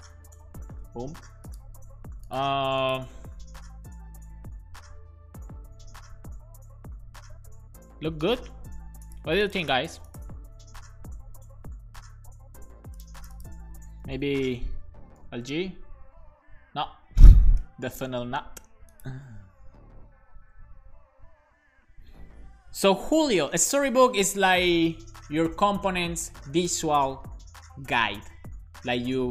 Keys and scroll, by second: 0.3 alt+shift+f, 0.7 super+s, 15.5 super+s, 17.4 BackSpace, 17.7 m.